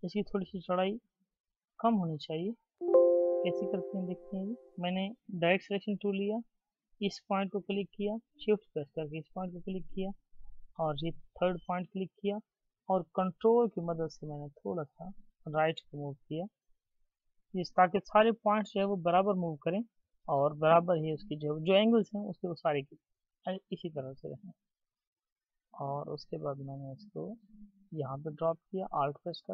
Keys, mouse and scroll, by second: 9.0 shift+click, 11.4 shift+click, 13.3 ctrl+Right, 14.6 ctrl+Right, 17.0 ctrl+Right, 19.8 double click.